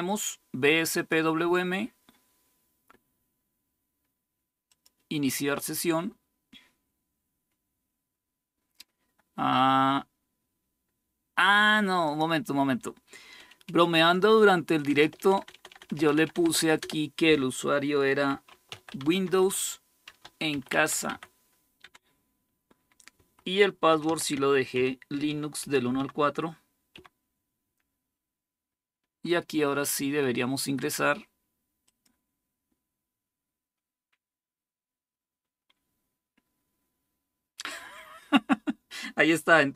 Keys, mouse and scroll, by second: 4.4 click, 11.8 click, 18.0 BackSpace, 18.9-20.8 BackSpace, 23.8-27.2 typing, 31.6-32.6 drag.